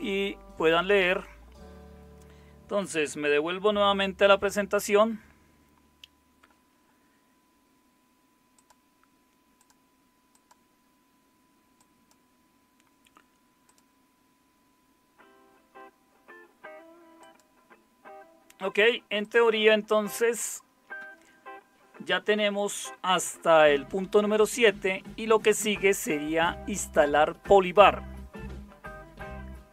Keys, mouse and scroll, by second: 4.1 super+7.